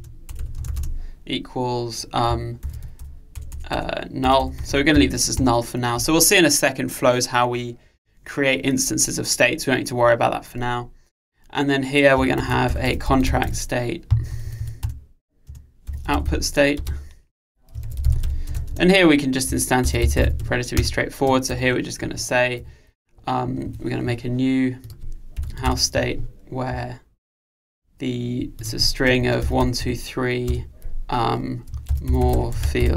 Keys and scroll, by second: 15.0 Return, 20.8 Return.